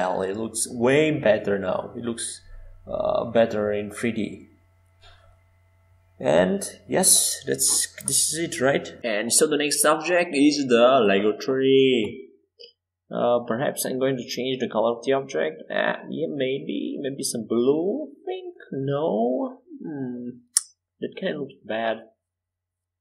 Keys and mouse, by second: 4.4-7.1 right drag, 4.6-7.1 drag, 4.6-7.1 middle drag, 11.6 middle click, 12.7-14.5 drag, 19.8-23.0 middle drag.